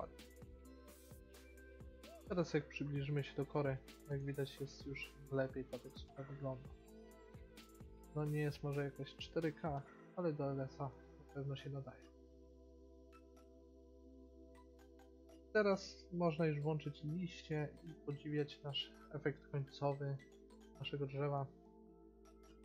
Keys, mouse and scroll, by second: 0.1 a, 1.0 click, 3.0 a, 4.1-5.8 middle drag, 11.4-15.7 middle drag, 16.5-18.3 drag, 18.3-19.7 middle drag, 19.9 a, 20.8 a.